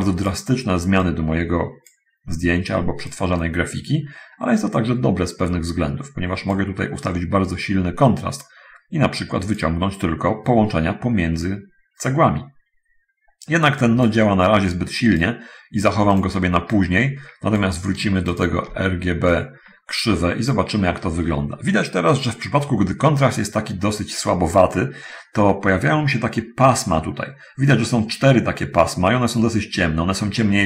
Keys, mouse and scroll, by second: 1.3-2.1 drag, 3.2-6.9 drag, 7.3-8.6 drag, 8.6 middle click, 9.3 click, 13.9-14.5 drag, 15.0 click, 16.4 click, 16.7-18.0 drag, 18.3 ctrl+shift+click, 19.6-20.9 drag.